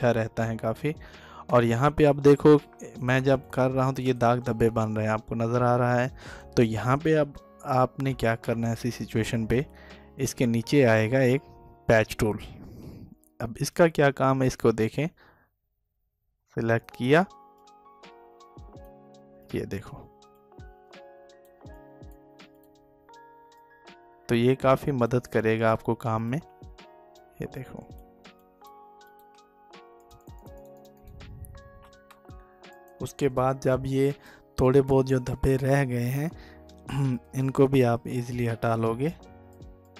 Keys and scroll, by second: 6.4 ctrl+alt+z.